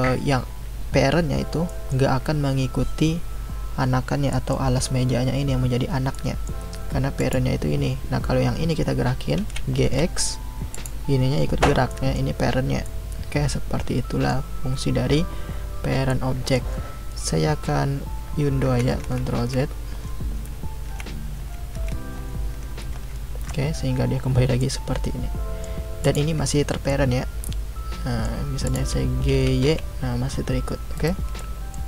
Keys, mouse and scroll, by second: 7.2 click, 9.4 g, 11.9-15.9 middle drag, 16.1-18.6 middle drag, 18.6 ctrl+z, 19.0 ctrl+z, 19.4 ctrl+z, 19.9 ctrl+z, 20.4 ctrl+z, 20.9 ctrl+z, 21.4 ctrl+z, 21.7 ctrl+z, 22.1 ctrl+z, 22.5 ctrl+z, 22.9 ctrl+z, 24.6-26.0 middle drag, 26.0 click, 26.9-28.6 middle drag, 28.6 click, 29.3 g, 31.4-31.8 middle drag.